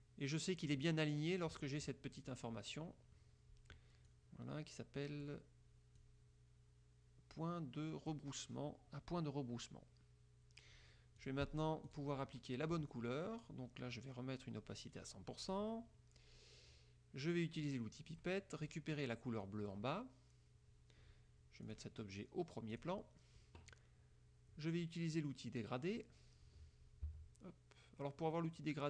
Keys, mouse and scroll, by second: 4.2 click, 6.1 click, 11.3 click, 12.0 click, 12.5 click, 15.1 right click, 15.6 click, 18.2 click, 19.5 click, 21.8 click, 22.9 click, 27.1 g.